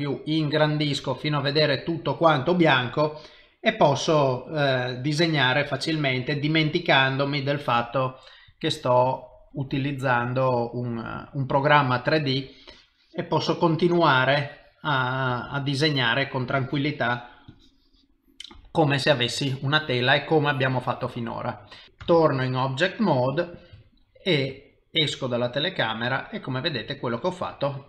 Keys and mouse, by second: 1.2 c, 4.0 click, 4.6 click, 5.6 click, 8.5 click, 9.5 click, 10.2 click, 12.7 click, 14.4 click, 15.3 click, 15.6 click, 16.6 click, 17.5 click, 19.3 click, 20.4 click, 22.0 ctrl+Tab, 23.8 ctrl+middle click, 24.6 middle click, 26.8 c, 27.3 middle click.